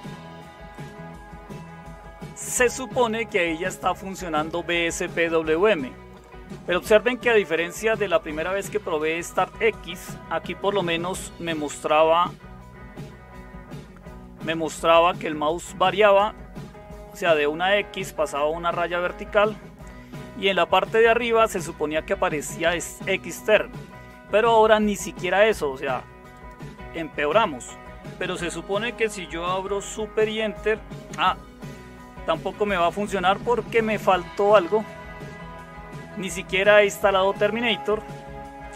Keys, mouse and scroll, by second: 34.6 super+Return.